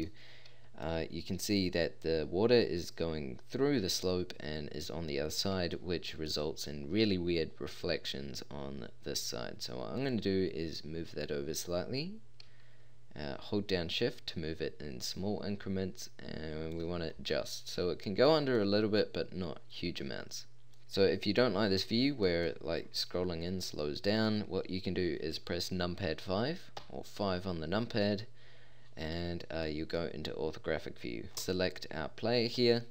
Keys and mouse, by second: 8.7-10.1 middle drag, 10.1-11.7 drag, 17.1-18.1 middle drag, 19.5 middle click, 26.1 middle click, 26.8 KP_5, 31.3 a.